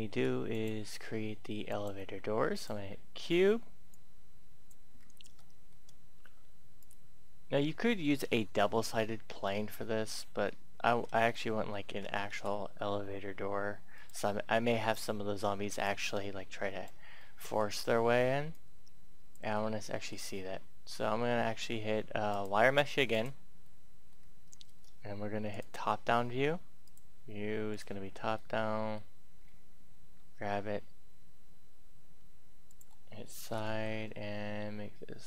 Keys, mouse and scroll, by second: 0.4 click, 4.9-5.3 scroll up 1, 5.3 shift+middle click, 5.8-6.8 scroll up 1, 6.8-10.1 drag, 10.4 middle click, 11.3 middle click, 12.3 s, 13.9 click, 14.6-15.8 scroll down 1, 15.8-17.1 drag, 17.2 middle click, 18.5 click, 19.5 middle click, 20.0 scroll up 1, 21.8-22.2 scroll up 1, 22.2 click, 23.6 middle click, 24.1-24.5 scroll up 1, 25.3 click, 28.3 shift+middle click, 30.2 shift+g, 32.4 click, 33.1-33.9 typing.